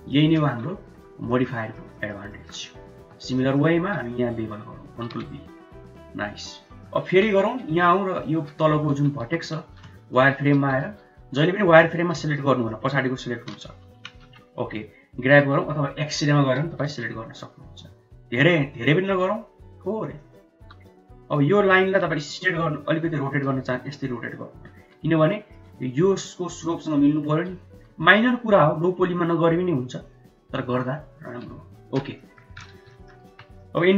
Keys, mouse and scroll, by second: 0.9 Tab, 1.3 middle click, 1.6 shift+middle click, 2.4 shift+middle click, 3.0 Tab, 3.4 shift+middle click, 3.8 1, 4.2 click, 5.1 ctrl+b, 6.1 Tab, 6.6 middle click, 7.1 KP_1, 7.5 KP_3, 8.2 Tab, 8.6 shift+middle click, 9.3 1, 9.6 shift+z, 10.0 click, 10.4 g, 11.6 click, 12.2 shift+z, 12.4 click, 14.0 KP_1, 14.3 KP_3, 15.3 g, 16.4 g, 20.6 g, 21.8 shift+middle click, 23.2 r, 25.3 shift+middle click, 26.7 shift+middle click, 27.8 r, 31.6 shift+z, 32.2 middle click, 32.8 shift+z, 33.0 middle click, 33.3 Tab, 33.6 middle drag.